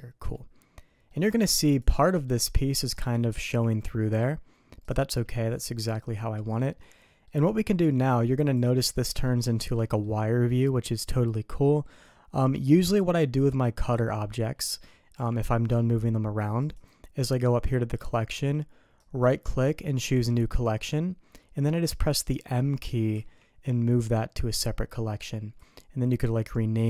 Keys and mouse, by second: 1.1 middle drag, 2.0 middle click, 3.4 g, 5.5 click, 6.9 click, 8.9 click, 9.5 shift+click, 9.9 click, 15.1 g, 18.9-20.3 drag, 23.1 m, 26.7 click.